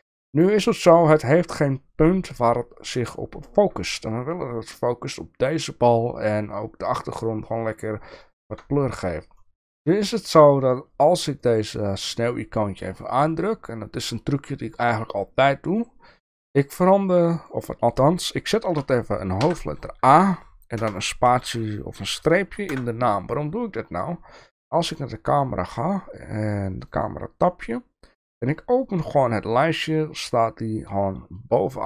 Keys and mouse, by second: 8.2-8.6 shift+middle drag, 9.5 shift+middle click, 10.1 shift+middle click, 15.6 click, 16.6-24.0 drag, 24.8 click, 26.8 click, 28.7-31.8 drag.